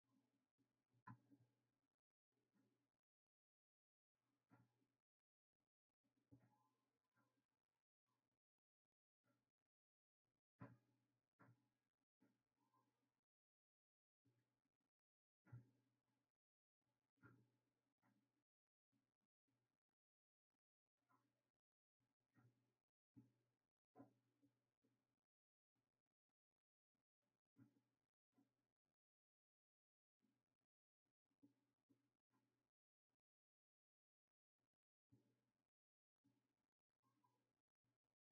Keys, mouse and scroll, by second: 1.1 ctrl+z, 2.0 click, 2.5-5.4 right drag, 5.4 drag, 5.8 click, 8.2-16.2 drag, 22.6-30.8 drag, 34.2-38.3 drag.